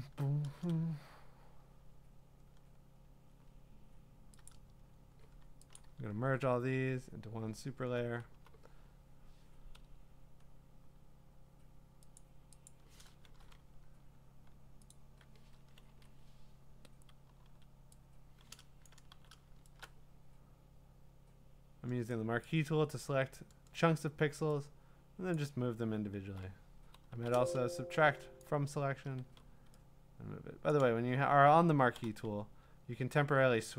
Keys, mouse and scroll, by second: 2.6-4.5 scroll, 4.5 click, 4.8-5.8 scroll, 5.8 click, 6.2 ctrl+e, 7.4-7.8 scroll, 8.3 b, 9.1 middle click, 12.4 click, 12.7 click, 14.9 click, 15.9 ctrl+z, 17.4 m, 19.0 click, 19.1 v, 22.1 click, 23.0 click, 25.4 click, 27.1 m, 28.4 alt+click, 29.2 v, 30.7 click, 31.9 m.